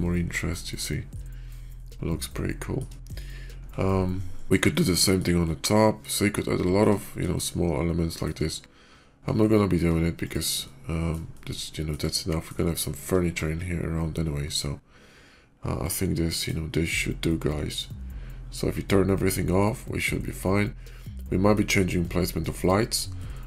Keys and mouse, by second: 0.0-1.1 shift+middle drag, 1.7-2.7 shift+middle drag, 4.7-5.1 shift+middle drag, 5.3-5.9 shift+middle drag, 6.5 shift+middle click, 7.2-8.2 shift+middle drag, 9.4 shift+middle click, 10.1-10.5 drag, 10.5-11.0 middle drag, 11.2 shift+middle click, 12.0-12.4 middle drag, 12.7 shift+middle drag, 15.7 click, 16.3 click, 17.6-19.1 drag, 19.3-21.5 middle drag, 22.1-22.5 shift+middle drag, 23.1-23.4 middle drag.